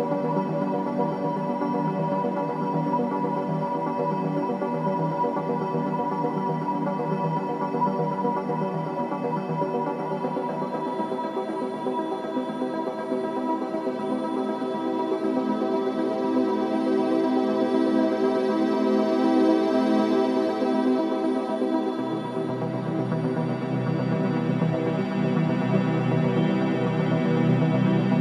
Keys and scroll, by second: 6.9 Escape, 7.9 Escape, 15.8 ], 17.5 4, 19.7 2, 25.5 4, 27.5 2.